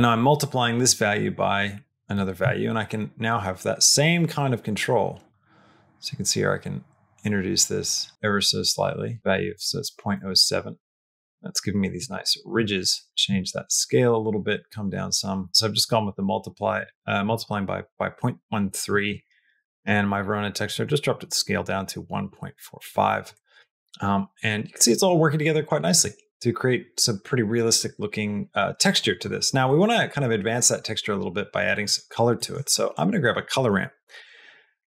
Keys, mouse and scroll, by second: 2.1-9.2 shift+drag, 10.0 middle click, 10.9 middle click, 12.1 shift+middle click, 12.8 shift+middle click, 13.0 middle click, 13.1-15.5 drag, 16.6 click, 18.9 middle click, 23.2 middle click, 24.7 middle click, 29.6 middle click, 32.3 middle click, 32.6 shift+a.